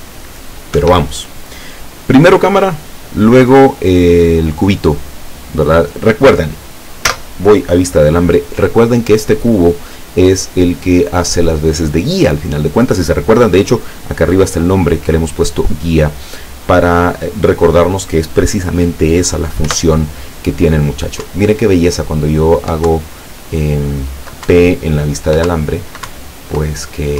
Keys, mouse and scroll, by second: 0.9 Escape, 7.1 z, 19.7 p, 21.3 Up, 22.9 Down, 24.6 Up, 25.5 Down, 26.2 Up.